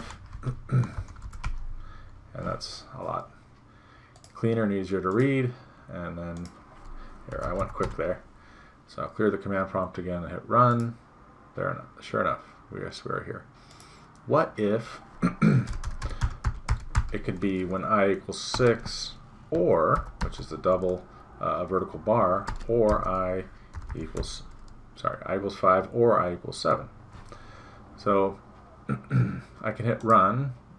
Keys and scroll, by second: 0.4 Delete, 1.0 Down, 1.2 End, 1.5 Delete, 7.9 Return, 15.7 BackSpace.